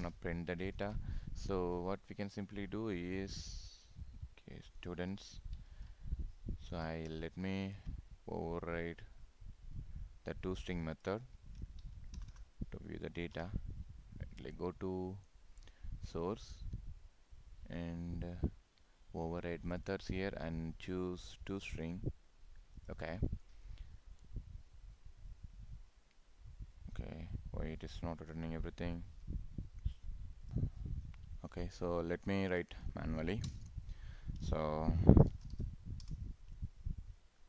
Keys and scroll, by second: 0.8 ctrl+s, 5.7 ctrl+s.